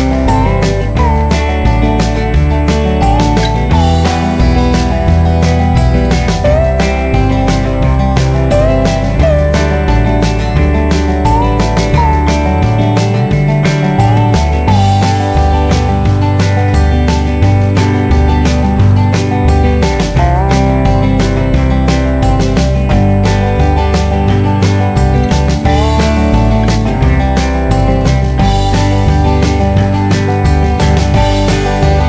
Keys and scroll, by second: 2.0 ctrl+z, 14.7 ctrl+alt+z.